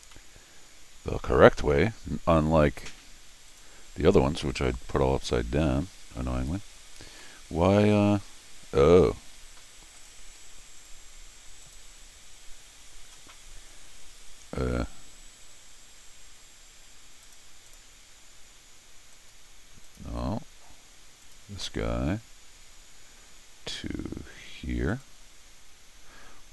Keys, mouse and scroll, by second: 0.1-9.0 middle drag, 3.5 click, 4.5 click, 10.0 click, 10.8 click, 11.6 click, 12.3 middle click, 17.2 click, 17.7 click, 19.1 click, 19.9 click, 21.2 click, 24.9 click.